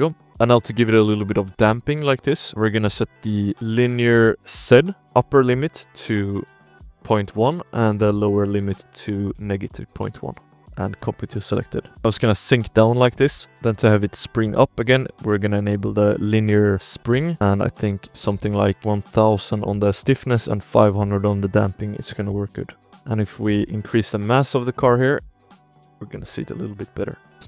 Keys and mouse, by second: 0.2 click, 0.9-1.6 shift+drag, 1.7 shift+drag, 2.0 click, 2.4 shift+click, 3.5 click, 4.0 shift+click, 5.0-6.9 drag, 5.5 BackSpace, 5.6-6.9 BackSpace, 8.1-9.7 drag, 9.7 middle click, 10.5 click, 10.9 middle click, 11.3 click, 11.8-12.8 middle drag, 12.0 space, 12.8 click, 13.5 space, 14.5 shift+click, 15.7-16.1 alt+drag, 17.0 click, 17.3 0, 18.1 click, 18.1 0, 18.8 click, 22.0 ctrl+s, 22.3 click, 22.6 click, 22.8 space, 22.9 space, 23.2 click, 24.6 click, 24.9 space, 27.3 space.